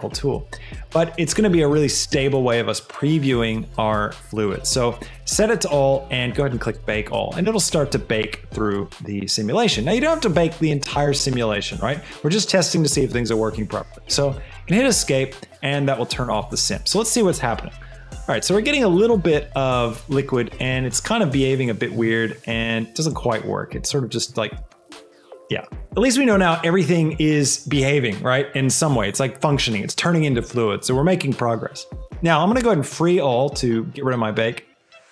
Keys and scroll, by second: 14.3 Escape, 19.4 space, 22.0 space, 24.5 space.